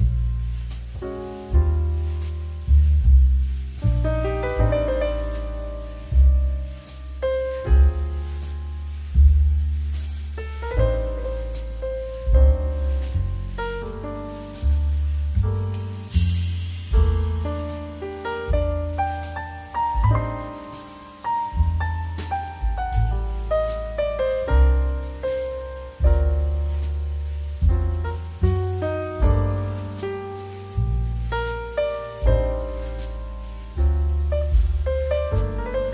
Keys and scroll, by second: 4.1 s, 5.0 KP_4, 5.0 KP_9, 6.9 KP_9, 7.1 KP_7, 9.3 KP_2, 9.3 Return, 14.0 m, 15.9 Escape, 19.5 q, 24.8 m, 26.4 m, 32.7 q.